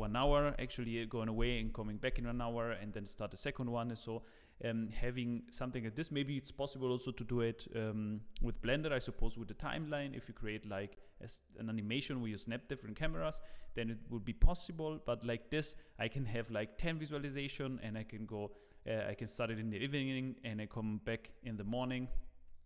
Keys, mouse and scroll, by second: 22.5 click.